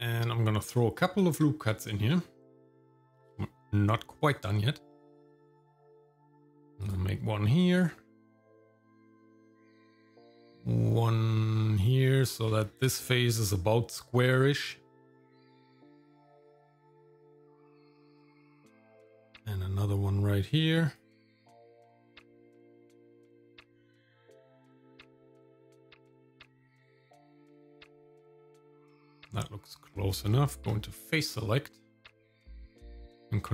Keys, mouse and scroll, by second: 1.0 Tab, 1.8 shift+middle click, 3.2 ctrl+r, 7.7 shift+middle click, 8.3 shift+middle click, 8.8 ctrl+r, 14.4 shift+middle click, 15.2 middle click, 16.1 shift+middle click, 16.9 shift+middle click, 18.1 ctrl+r, 21.3 shift+middle click, 22.1-22.5 scroll down 1, 23.5 middle click, 27.0-28.5 shift+middle drag, 28.8 shift+middle click, 29.2 middle click, 29.9 Tab, 32.4 click.